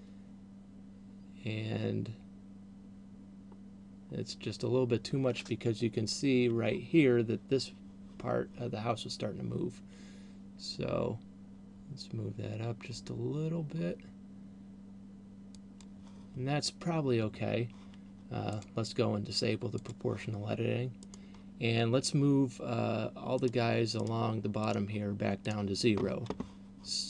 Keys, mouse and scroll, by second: 16.1 click, 18.6 click, 21.3 right click, 23.6 right click, 24.3 right click, 24.8 right click, 25.6 right click.